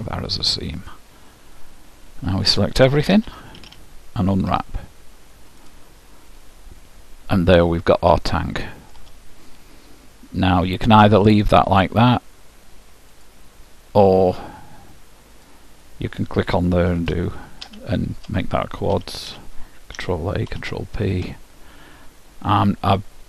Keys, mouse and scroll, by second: 0.6-2.3 middle drag, 3.2 a, 3.6 a, 4.5 u, 8.3-10.2 middle drag, 13.2-15.2 drag, 15.4-17.4 drag, 19.0 a, 19.4 a, 20.0 ctrl+a, 20.6 ctrl+p.